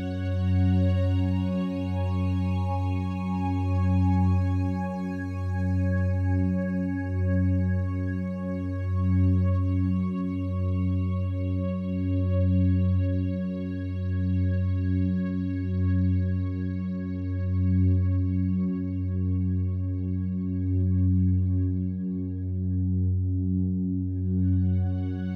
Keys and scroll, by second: 19.8 BackSpace, 20.4 3, 20.7 Return, 22.0 ctrl+7.